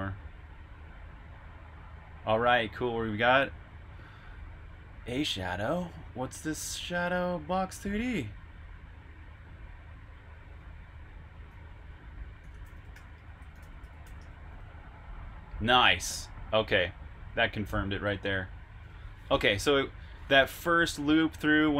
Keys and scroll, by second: 12.1-14.5 typing.